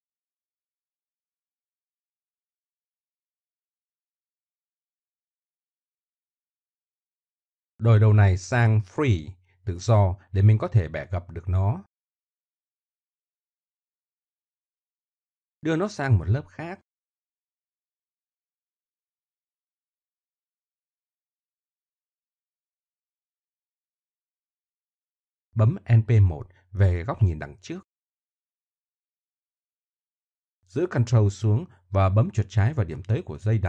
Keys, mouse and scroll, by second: 1.4 middle click, 2.7 right click, 4.1 middle click, 4.6 middle click, 6.2-7.3 middle drag, 8.4 v, 11.0-12.6 middle drag, 13.2-15.3 middle drag, 16.4-16.8 middle drag, 16.9-18.5 middle drag, 20.0 m, 21.0 m, 24.5 middle click, 25.3 middle click, 25.4 click, 26.0 middle click, 27.8 KP_1, 31.2 click, 32.3 Tab.